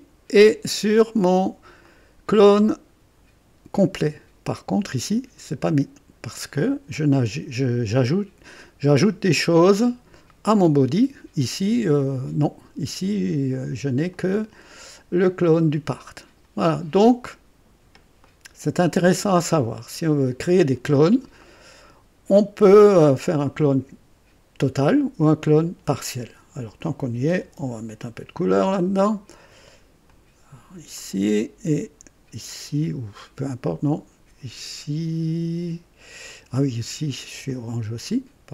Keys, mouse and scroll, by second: 1.8-2.8 drag, 14.1 click, 16.7-17.1 scroll down 2, 18.2-19.1 drag, 20.4 right click, 21.4-22.1 drag, 22.4-23.1 drag, 26.8 click, 27.4 ctrl+d, 28.4 ctrl+click, 30.1 click, 31.0 click, 36.2 click, 37.5 click.